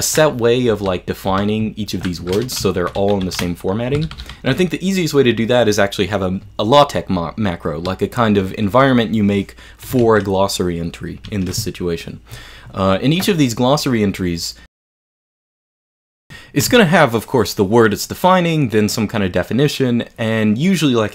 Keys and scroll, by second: 0.8 j, 1.3 k, 3.9-4.5 typing, 6.5 typing, 10.1 super+Escape, 11.3 super+Escape.